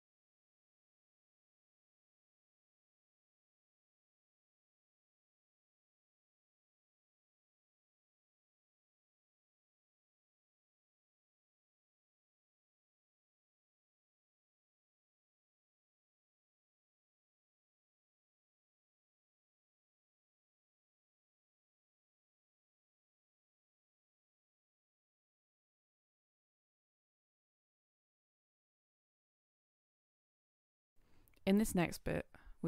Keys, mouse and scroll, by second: 2.9 scroll up 1, 3.7-15.7 drag, 17.1 click, 18.9 Return, 20.4 click, 23.8 scroll up 1, 24.3 click, 25.7 click, 28.3 Return, 30.0 click.